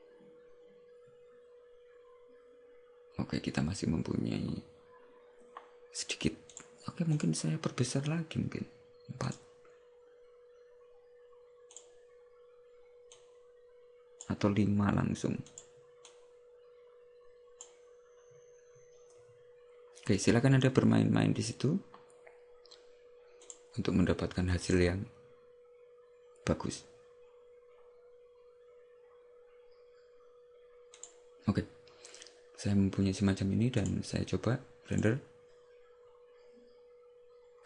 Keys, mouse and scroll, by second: 7.3 click, 9.3 click, 11.9 click, 23.5 click, 31.2 click, 33.9 click.